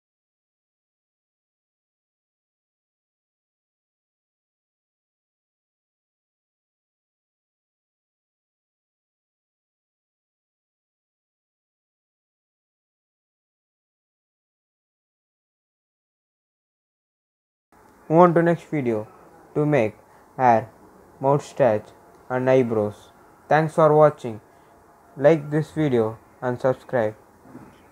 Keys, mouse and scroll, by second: 11.7 ctrl+s, 12.0 scroll down 1, 12.9-14.3 drag, 14.3 scroll up 1, 14.7 click, 15.4-16.5 scroll down 1, 16.5 click, 18.6 click, 19.8 ctrl+s, 21.2 click.